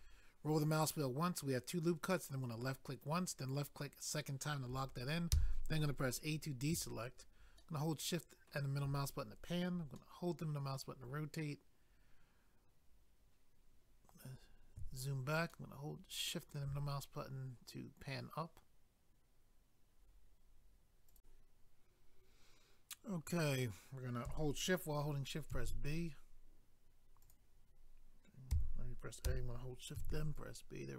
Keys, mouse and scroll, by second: 0.1-0.6 scroll up 1, 2.4 click, 2.6 click, 3.4 click, 3.5 click, 5.3 a, 7.6 shift+middle click, 10.0 middle click, 11.8 scroll down 1, 13.8 scroll down 1, 15.6 shift+middle click, 21.1 click, 21.2 click, 27.2 click, 27.3 click, 28.5 a, 30.4 click.